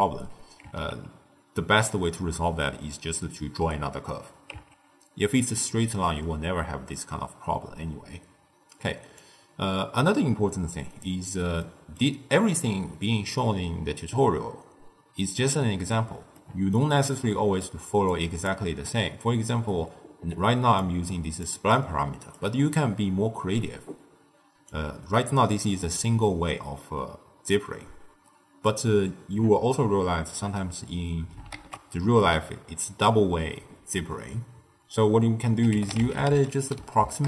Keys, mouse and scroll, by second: 0.6 Tab, 4.5 Tab, 9.1-11.5 drag, 11.5-14.6 middle drag, 16.3-17.1 middle drag, 17.1 click, 18.0 click, 20.6 d, 20.7 click, 21.4 d, 21.5 d, 21.7 right click, 22.3 d, 24.6-27.6 drag, 31.5 ctrl+a, 36.9 Down.